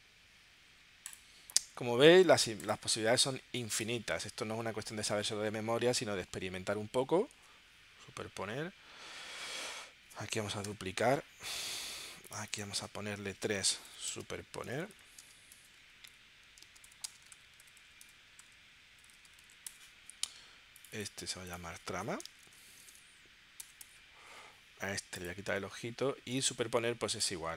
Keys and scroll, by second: 6.3 super+Tab, 7.4 super+Tab, 10.7 super+j, 13.6-19.3 typing, 19.7 Return, 22.2 BackSpace, 22.8 BackSpace, 23.7 BackSpace, 23.8 Return.